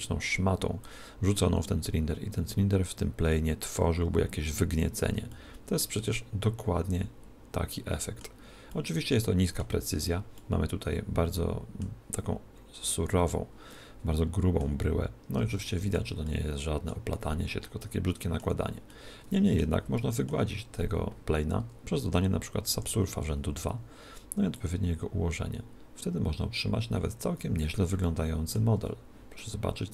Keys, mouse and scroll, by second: 0.8 click, 5.3-7.8 middle drag, 8.7-12.2 middle drag, 13.0 scroll up 1, 13.2-15.6 middle drag, 15.6 scroll down 1, 15.6-21.8 middle drag, 22.8 ctrl+2, 24.6 click, 28.1-29.9 middle drag, 28.8 z.